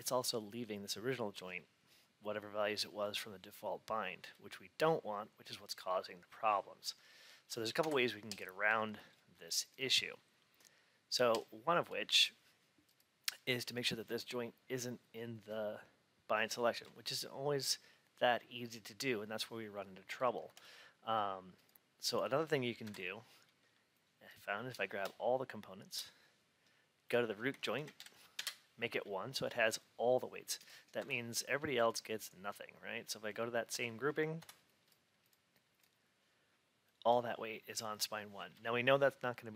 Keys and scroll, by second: 7.7 F8, 22.7 F8, 28.2 Return, 30.9 F8, 36.8 F8.